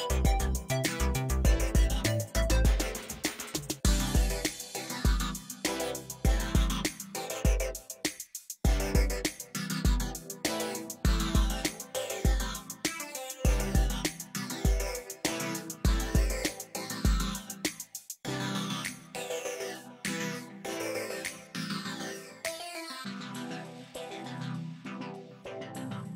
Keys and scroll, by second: 4.4 ctrl+space, 4.6 ctrl+space, 22.8 ctrl+alt+z, 23.7 ctrl+space, 24.7 ctrl+z, 25.3 space, 25.9 space.